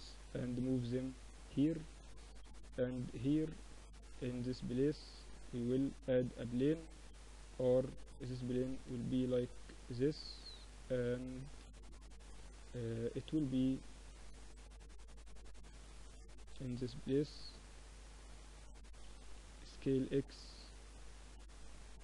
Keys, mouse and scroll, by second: 0.1 click, 2.0 Tab, 2.6 Tab, 4.4 shift+a, 6.5 r, 8.9 s, 12.4-14.0 middle drag, 13.4 Tab, 14.0-15.8 drag, 14.7 z, 15.5 KP_7, 16.0-17.1 middle drag, 17.1-18.6 drag, 18.6 s, 21.4-22.0 middle drag.